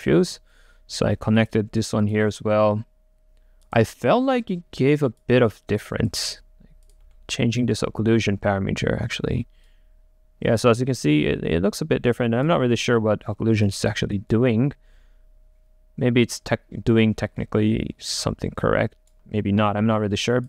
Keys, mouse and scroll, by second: 12.7 ctrl+z, 18.7 typing.